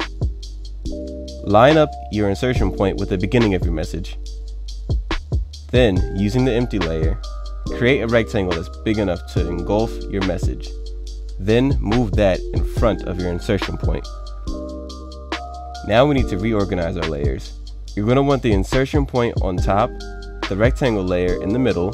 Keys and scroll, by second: 0.4 F5.